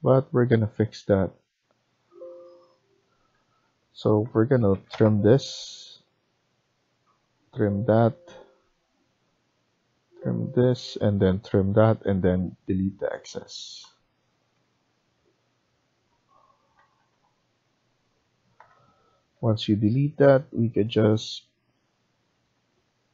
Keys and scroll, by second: 2.2 Escape, 2.9 Escape, 3.2 Escape, 4.5-4.9 typing, 11.9 Escape, 12.0 Escape, 13.7 Delete, 16.7 Escape, 16.9 Escape, 18.5 Delete, 19.3 Escape, 19.5 Escape.